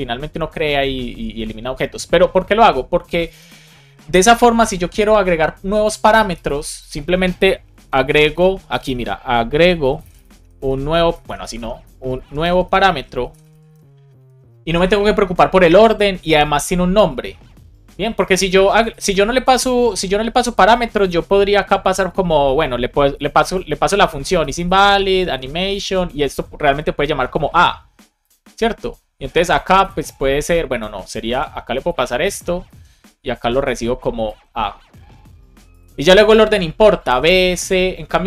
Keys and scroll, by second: 7.8 space, 8.6 BackSpace, 10.2-12.8 typing, 14.1 alt+shift+Left, 14.6 super+c, 21.3 BackSpace, 24.0 shift+i, 25.1 shift+a, 26.3 alt+shift+Left, 31.2 super+c, 32.2 BackSpace, 32.6 super+v, 36.3 space, 37.3 space.